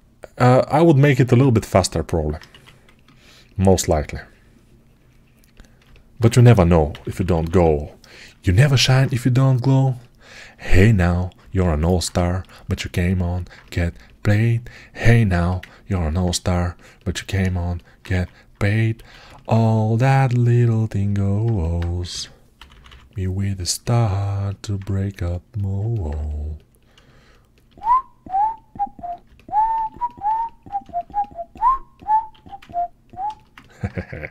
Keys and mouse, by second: 1.0 ctrl+Tab, 1.0-5.4 ctrl+middle drag, 2.4 1, 5.4-20.9 ctrl+right drag, 6.3 g, 6.8 ], 6.9 ], 18.0 1, 21.9 g, 22.4 ], 22.6 ], 27.6-32.2 alt+right drag, 32.2 alt+q.